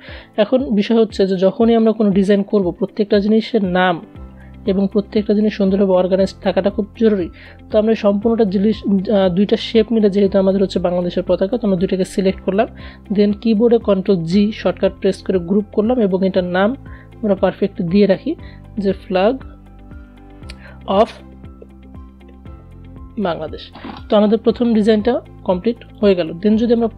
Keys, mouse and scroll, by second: 6.1-12.7 drag, 12.7 ctrl+g, 15.5 ctrl+g, 16.8-21.9 typing, 16.9 click, 24.2 click.